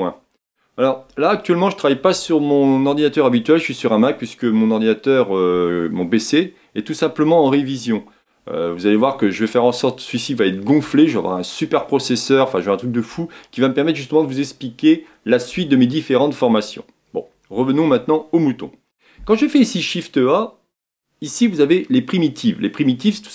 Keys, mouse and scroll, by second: 18.5 shift+a.